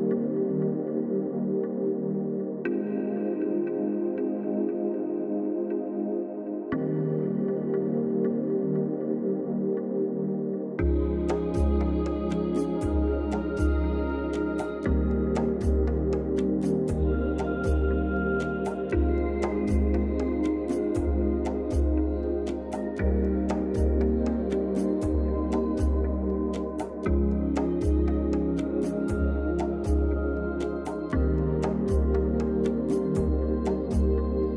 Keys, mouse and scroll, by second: 13.0-15.8 drag, 23.7-24.9 drag.